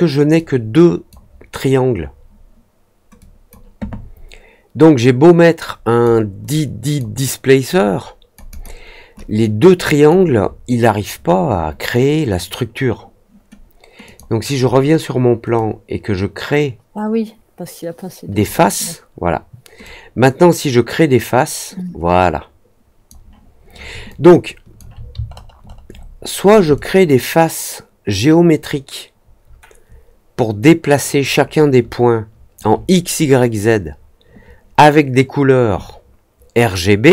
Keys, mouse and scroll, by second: 0.3-1.0 drag, 3.1-3.4 drag, 4.9-6.0 drag, 6.4-6.9 drag, 7.7 click, 8.4 click, 9.1-10.0 drag, 14.0 click, 15.5-18.3 drag, 19.8-23.0 drag, 24.0-24.7 alt+drag, 25.2 alt+middle click, 25.6 alt+middle click, 25.9 alt+middle click, 26.7-32.5 alt+drag.